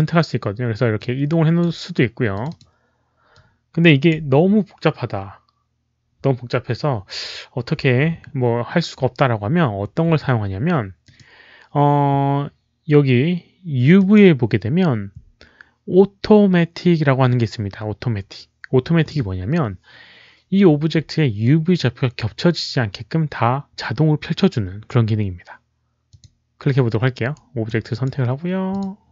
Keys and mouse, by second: 0.8 click, 2.2 click, 2.5 alt+right click, 2.5 w, 3.2 click, 7.6 click, 10.0 click, 10.9 click, 13.1 click, 13.9 click, 17.0 click, 17.2 click, 26.0 click, 27.2-27.6 right drag, 27.8 click, 28.6 click, 29.0 click.